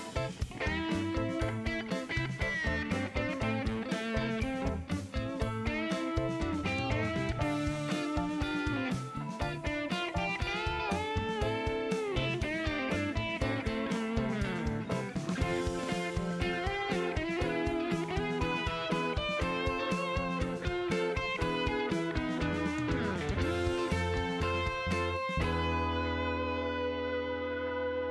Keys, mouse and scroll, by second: 0.8 scroll down 1, 1.6 middle click, 2.3 shift+right click, 3.5 shift+right click, 4.2 shift+scroll down 2, 4.8 middle click, 5.6 shift+middle click, 6.3 shift+right click, 6.8 shift+middle click, 7.3 shift+right click, 8.0 shift+scroll down 2, 8.7 click, 9.3 space, 10.1 space, 13.4 click, 14.6-15.1 scroll up 3, 22.1 shift+right click, 23.5 shift+middle click, 23.9 middle click, 24.0 scroll up 2, 24.5 shift+right click, 25.4 shift+middle click, 25.8 scroll down 2, 26.4 middle click, 27.3 shift+right click.